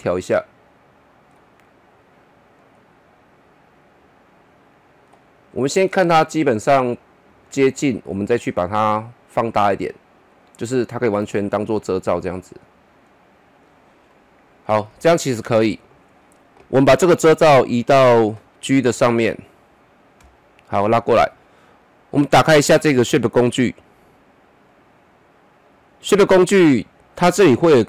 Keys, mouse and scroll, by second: 5.9 middle click, 9.9-14.1 drag, 14.1-17.0 middle drag, 17.0-22.1 drag, 22.1 click.